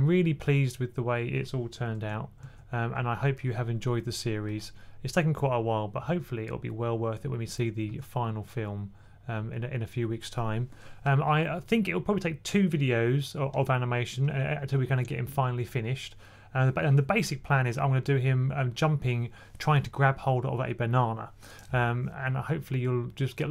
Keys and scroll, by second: 2.3 super+z, 7.8 super+z.